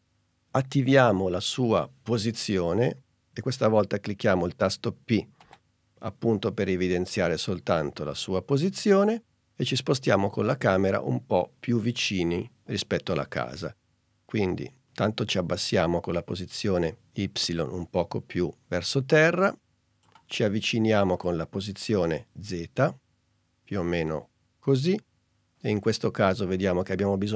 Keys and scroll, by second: 5.5 p.